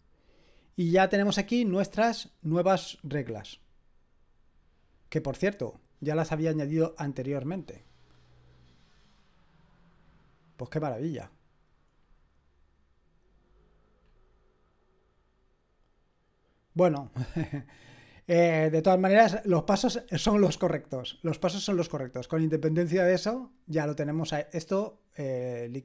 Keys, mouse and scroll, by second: 1.0-1.8 scroll down 1, 1.8-3.5 scroll up 1, 3.5-5.8 drag, 10.5-11.6 drag, 12.4-14.0 scroll up 1, 14.0-15.2 scroll down 1, 15.2-19.5 scroll down 1, 19.5-20.5 scroll down 1, 20.5-22.0 scroll down 1, 22.0 click.